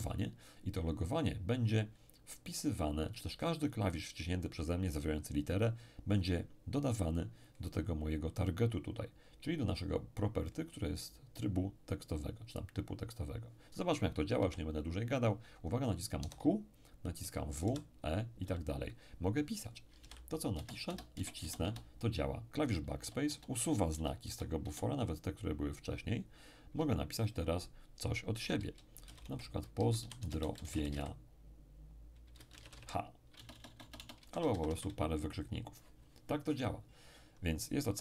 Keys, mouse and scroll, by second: 14.4 p, 16.2 q, 17.2 w, 17.6 e, 18.4 r, 19.9-21.1 typing, 23.0 BackSpace, 29.0-30.9 typing, 32.4-34.7 typing.